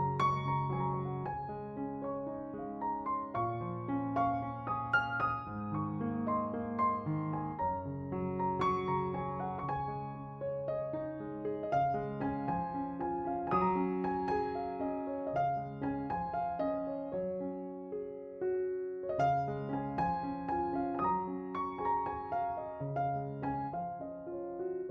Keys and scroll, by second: 2.3 s, 5.6 s, 8.2 s, 15.4 s, 20.8 ctrl+z, 21.0 ctrl+z, 23.6 2.